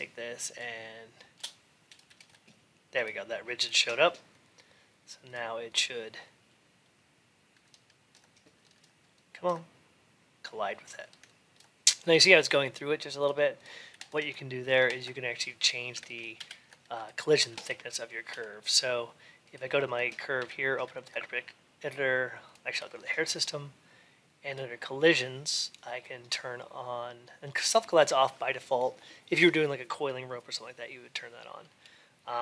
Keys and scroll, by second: 16.2 alt+x, 20.2 ctrl+a.